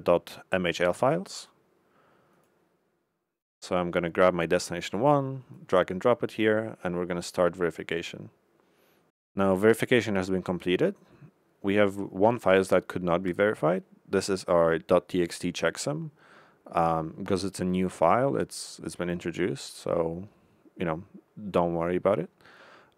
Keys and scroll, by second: 1.3 Left.